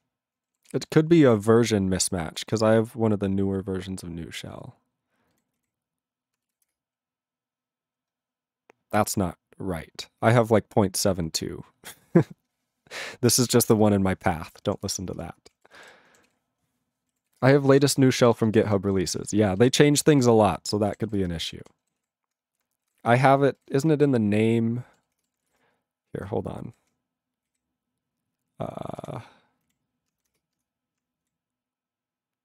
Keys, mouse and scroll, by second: 0.7 ctrl+s, 15.3 ctrl+s, 15.6 ctrl+a, 15.7 ctrl+space, 15.7 ctrl+e, 15.8 ctrl+g, 16.2 ctrl+s, 17.2 ctrl+s, 17.4 ctrl+space, 17.8 ctrl+alt+b, 17.9 ctrl+g, 18.2 ctrl+s, 18.3 ctrl+space, 18.8 ctrl+alt+f, 18.9 ctrl+g, 19.2 ctrl+s, 19.3 ctrl+space, 19.7 ctrl+alt+b, 19.8 ctrl+g, 20.1 ctrl+s, 20.2 ctrl+space, 20.6 ctrl+alt+f, 20.7 ctrl+g, 21.0 ctrl+s, 21.2 ctrl+space, 21.6 ctrl+alt+b, 21.6 ctrl+g, 22.0 ctrl+s, 23.6 ctrl+g, 25.3 ctrl+g.